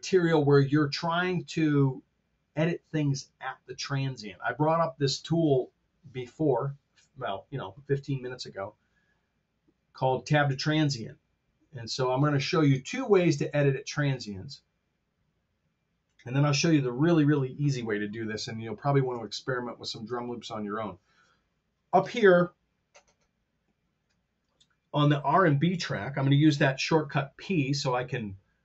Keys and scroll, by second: 19.3 super+Tab.